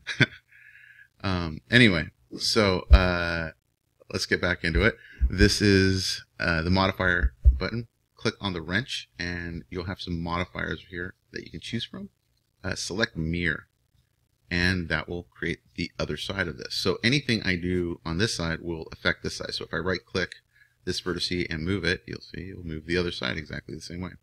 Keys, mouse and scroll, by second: 6.1-13.9 drag, 21.3-23.7 drag, 21.3-23.7 right drag.